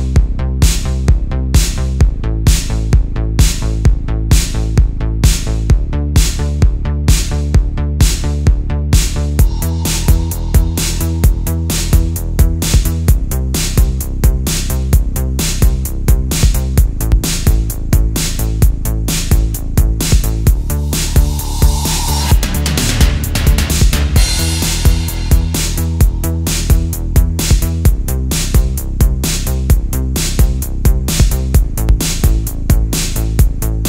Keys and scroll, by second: 0.1 super+z, 0.2 super+space, 3.1 super+z, 3.9 space, 4.8 space, 6.0 space, 6.7 alt+super+space, 7.7 space, 8.2 space, 8.7 space, 9.8 space, 10.6 space, 11.9 space, 12.2 super+z, 13.1 space, 13.8 space, 15.2 space, 15.9 space, 16.6 super+z, 18.0 space, 18.9 alt+super+space, 19.4 alt+super+space, 20.2-23.1 typing, 24.7 space, 25.4 super+space, 27.4 space, 27.9 space, 31.7 space.